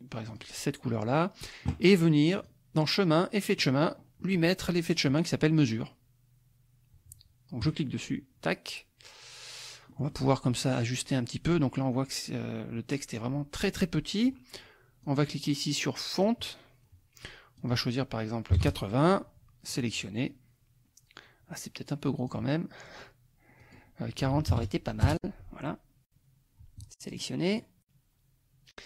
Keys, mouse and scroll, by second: 0.3 click, 0.9 click, 2.4 click, 3.6 click, 4.8 click, 7.7 click, 9.9 click, 15.0-16.4 drag, 17.5 click, 18.5 KP_8, 19.1 KP_0, 19.7 click, 22.1 click, 23.6 click, 24.3 ctrl+a, 24.5 ctrl+KP_4, 25.1 ctrl+Return, 27.1 click, 27.5 click.